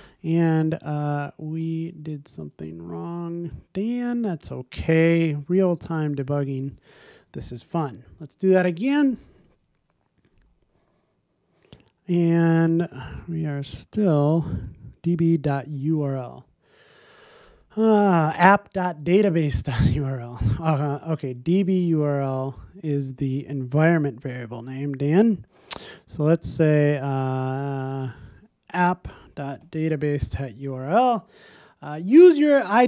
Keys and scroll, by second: 7.4 super+s, 8.6 ctrl+r, 30.0 Return, 30.4 super+s, 32.1 ctrl+r.